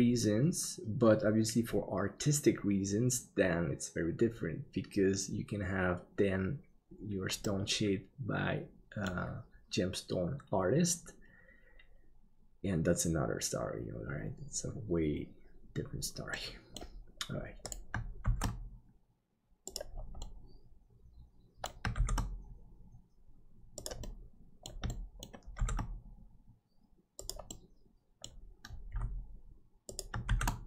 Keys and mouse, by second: 7.4-9.1 middle drag, 16.3 middle click, 18.2 shift+d, 20.2-21.6 middle drag, 21.9 shift+d, 24.0 middle click, 24.9 shift+middle click, 25.6 shift+d, 27.5 middle click, 28.9 g, 30.2 shift+d.